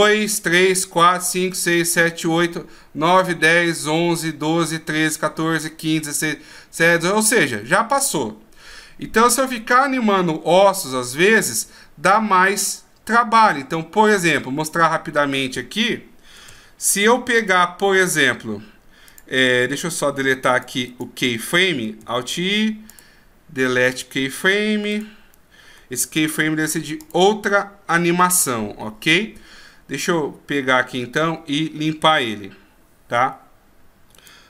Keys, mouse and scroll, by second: 7.7-9.7 scroll down 2, 9.7 middle click, 9.7 scroll down 1, 13.5-14.0 scroll up 1, 14.0-16.5 scroll down 1, 16.5 alt+i, 19.1 click, 20.5 click, 20.9 click, 22.0 alt+i, 24.9 click, 26.2 alt+i, 34.1 right click.